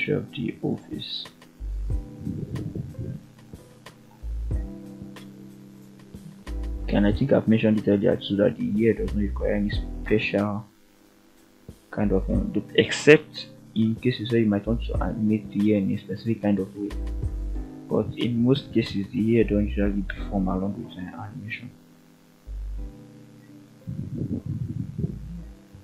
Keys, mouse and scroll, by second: 1.3 click, 2.7 shift+click, 3.9 ctrl+click, 5.0 f, 5.8 click, 6.5 shift+click, 7.5 f, 10.2-10.6 scroll down 2, 10.9 f, 16.8 click, 17.0 click, 19.0 click, 19.8 ctrl+click, 21.1 f, 22.6 click, 22.8 click, 23.8-24.2 scroll down 2, 24.2-24.5 middle drag, 25.2-25.8 scroll up 3.